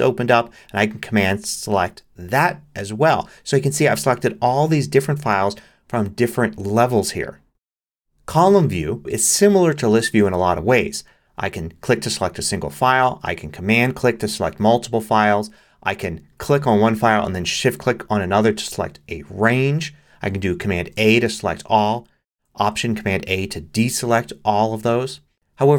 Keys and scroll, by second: 20.8 super+a, 23.7 super+a.